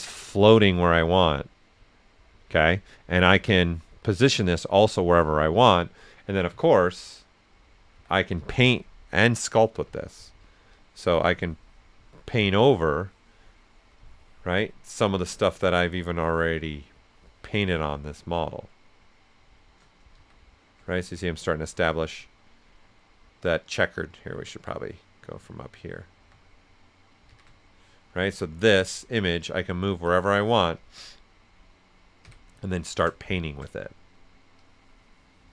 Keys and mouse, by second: 0.3 ctrl+click, 2.9 ctrl+click, 4.0-6.5 ctrl+drag, 6.5 ctrl+z, 9.3 ctrl+click, 9.8 ctrl+s, 9.9 ctrl+click, 10.7-15.6 ctrl+drag, 15.6-20.1 ctrl+drag, 20.1 shift+z, 22.3 right click, 24.7-26.1 right drag, 26.1 a, 27.2 shift+z, 28.2 z, 28.8 click, 30.0 click, 30.7-32.2 drag, 32.2-33.3 typing, 32.9-34.6 drag, 34.6-35.5 drag.